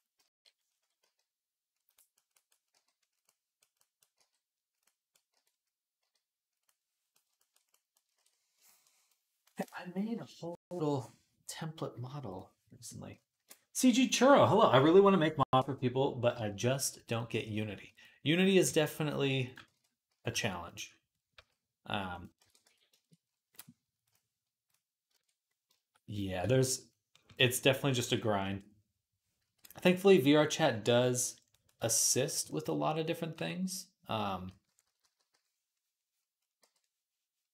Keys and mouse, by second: 0.0 KP_7, 0.8 g, 1.6-3.3 right drag, 2.5 g, 3.3-4.7 drag, 4.1 g, 5.1 g, 5.8 g, 6.7-8.0 drag, 8.0 ctrl+s, 8.5 shift+middle click, 10.6-12.7 right drag, 12.7-18.3 drag, 16.9 right click, 18.4 s, 19.5 ctrl+z, 19.9 s, 20.9-23.0 right drag, 21.2 s, 22.2 ctrl+a, 23.0 click, 23.0-24.8 right drag, 24.5 click, 24.9 ctrl+Tab, 25.0 right click, 25.3-34.3 shift+drag, 29.2 v, 29.5-34.3 right drag, 33.2 d, 34.3-35.1 typing, 36.4 v, 37.4 click.